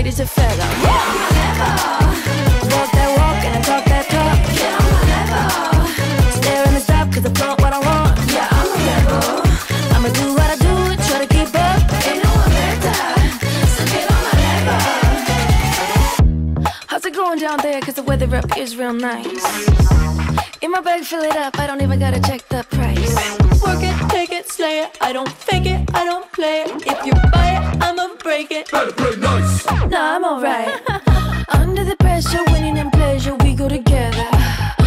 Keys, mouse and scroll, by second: 1.7-4.5 typing, 5.5-6.8 typing, 9.4 Return, 11.4-15.2 drag, 20.9 ctrl+space, 21.4-22.6 typing, 23.3 click, 28.4 ctrl+d, 31.0 click, 32.0 Return, 32.1-34.8 typing.